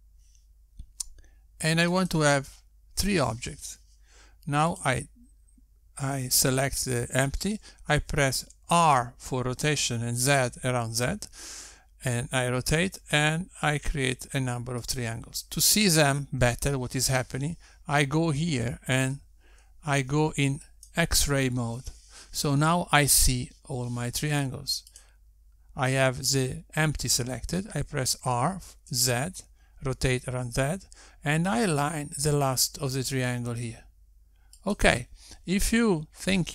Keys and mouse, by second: 3.0 click, 5.8 click, 9.3 r, 21.9 click, 25.8 click, 29.2 r.